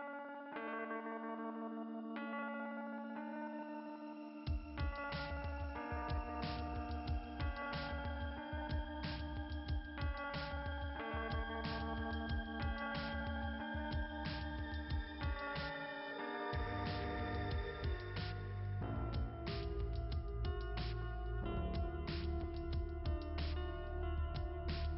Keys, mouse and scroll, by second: 2.5 click, 3.9 click, 5.2-5.8 scroll down 3, 7.6-8.7 typing, 10.5 click, 11.0-12.2 scroll down 1, 12.2 scroll down 1, 12.3 click, 13.4 click, 15.1 click, 16.8 click, 20.2 alt+s, 20.5 middle click, 20.8-22.6 typing.